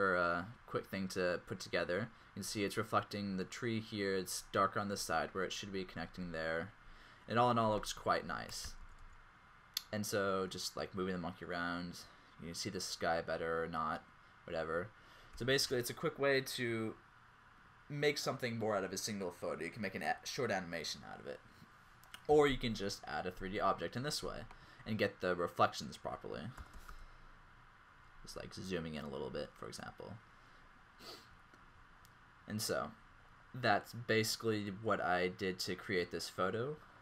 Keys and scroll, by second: 9.0 r, 9.1 r, 15.8 scroll, 26.7 typing, 28.8 typing.